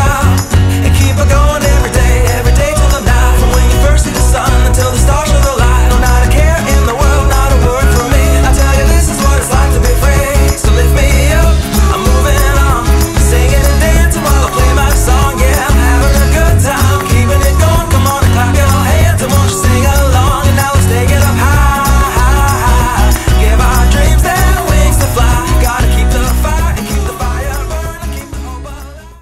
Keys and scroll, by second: 19.0 alt+e, 19.2 alt+2, 21.1 alt+i.